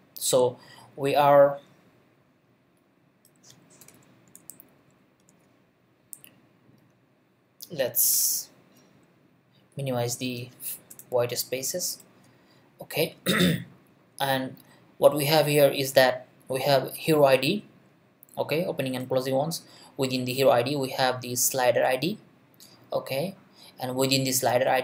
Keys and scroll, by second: 3.8 BackSpace, 8.1 BackSpace, 10.9 BackSpace.